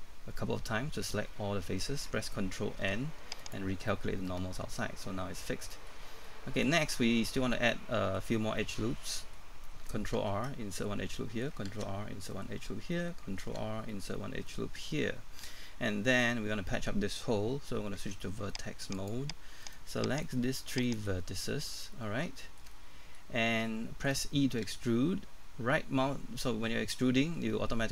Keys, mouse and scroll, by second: 0.7-2.2 scroll down 1, 2.8 ctrl+n, 3.4 click, 4.3 middle click, 6.0 scroll up 1, 6.2 middle click, 7.3 scroll down 1, 7.5 middle click, 10.7 ctrl+r, 10.7 middle click, 12.3 ctrl+r, 12.3 middle click, 13.9 ctrl+r, 13.9 middle click, 14.2 scroll up 1, 14.5 middle click, 18.0 ctrl+Tab, 18.9 click, 19.6 right click, 20.8 shift+right click, 21.6 scroll up 1, 21.9 middle click, 22.7 middle click, 23.4 scroll up 1, 23.6 shift+middle click.